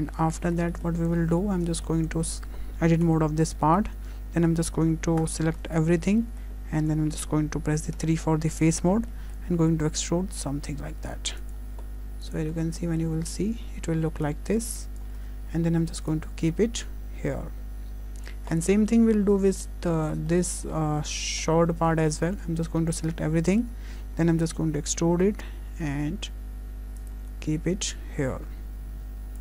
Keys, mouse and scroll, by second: 0.1 Tab, 0.4-1.2 scroll down 3, 0.8 shift+middle click, 1.2 middle click, 1.7 shift+middle click, 3.1 Tab, 3.4 scroll up 2, 3.6 shift+middle click, 5.2 a, 5.8 shift+middle click, 6.2 middle click, 8.0 3, 9.1 middle click, 9.7 e, 12.6 middle click, 14.3 click, 15.2 Tab, 16.1 click, 18.6 click, 18.8-20.0 scroll down 1, 20.2 scroll down 2, 20.3 shift+middle click, 20.7-21.4 scroll down 1, 21.4 scroll down 1, 22.0 shift+middle click, 22.2 Tab, 23.0 a, 23.5 middle click, 23.9 scroll down 1, 24.4 scroll up 1, 24.7 e, 27.2 Tab, 27.9 click.